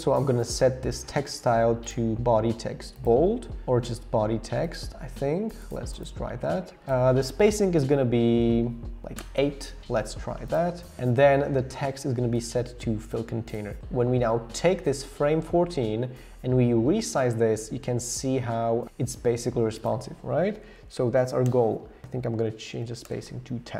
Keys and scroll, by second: 7.5 Down, 7.6 Down, 8.3 Down, 8.5 Down, 8.6 Down, 9.2 Return, 20.5 Up, 20.6 Up, 20.7 Up, 20.9 Up, 21.5 Return, 22.6 Page_Down, 23.1 Return.